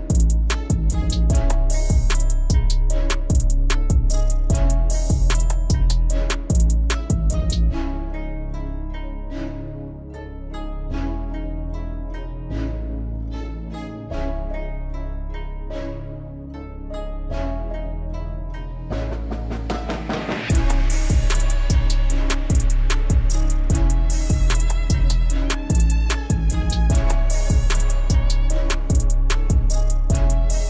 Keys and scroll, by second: 5.2 alt+w, 13.1 alt+x.